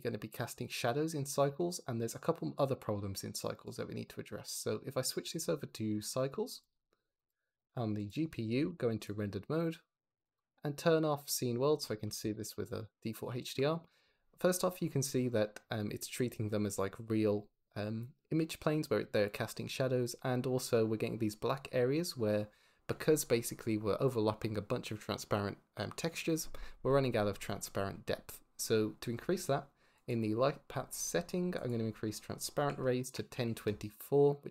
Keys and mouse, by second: 1.5 shift+click, 3.7-6.7 drag, 7.1-8.0 drag, 8.4 z, 10.3-11.3 drag, 29.8 click, 31.6-33.6 drag.